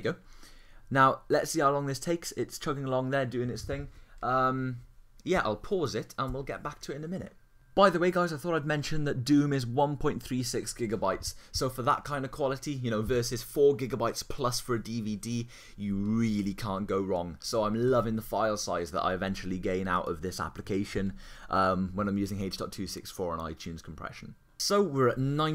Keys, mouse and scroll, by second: 17.9 super+w.